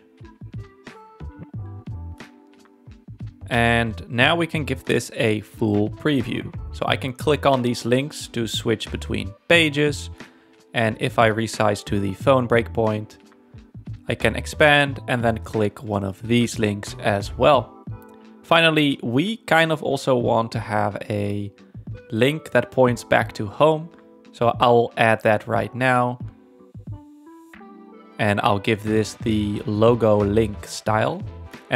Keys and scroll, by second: 25.9 space.